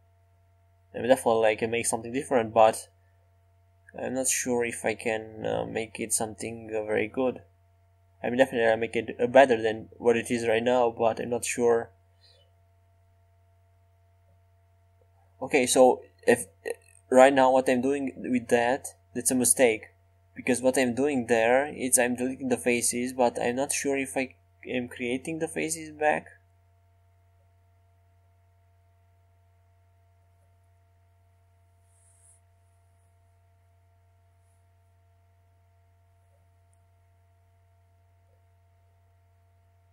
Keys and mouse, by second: 7.4-12.9 right drag, 8.7-12.9 drag, 13.4 x, 15.1-17.4 right drag, 15.1 x, 16.2 x, 17.1 x, 18.3 x, 19.0 click, 19.0 right click, 23.2 x, 24.4 x, 25.5 x, 26.7 x, 28.8-30.7 drag, 28.9 x, 32.5 Tab, 36.5 shift+a.